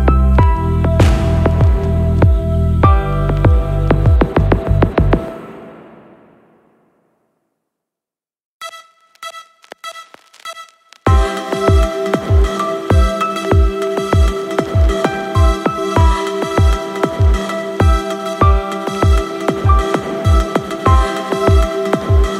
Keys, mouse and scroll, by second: 2.9 click, 4.4 space, 10.0 space, 11.5 click, 12.6-13.0 scroll down 2, 13.6 click, 13.9 scroll down 2, 14.5 click, 15.7 click, 16.3 space, 20.4 space, 22.2 click.